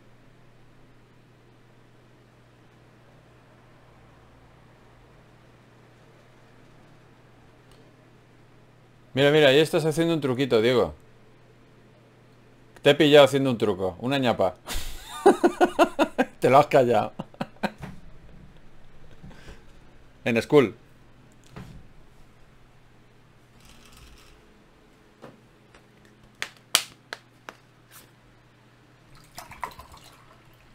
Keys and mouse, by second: 2.5 f, 3.5 f, 4.9 Tab, 6.3 f, 6.6-12.6 drag, 14.2 KP_Divide, 16.0 Tab, 22.8 Tab, 25.2 Tab, 28.3 KP_Divide.